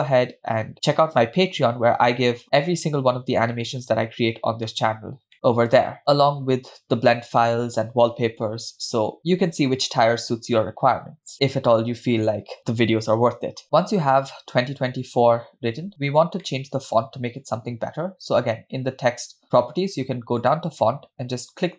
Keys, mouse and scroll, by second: 4.7-5.1 shift+middle drag, 5.3-6.0 middle drag, 6.0-6.7 scroll down 1, 7.5 middle click, 14.2 scroll up 2, 15.7-16.3 scroll down 1, 16.4-16.9 shift+middle drag, 20.5 click.